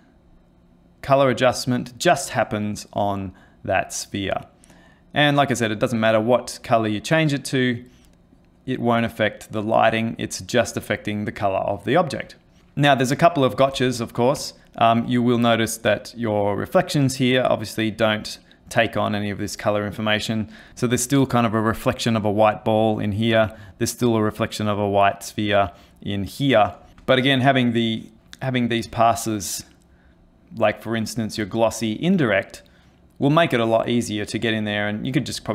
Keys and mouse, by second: 13.8 ctrl+space, 14.5 ctrl+middle click, 26.9 ctrl+space, 27.3 middle click, 27.6 middle click, 28.0 middle click, 28.2 middle click, 29.2 ctrl+shift+click, 30.8 ctrl+shift+click.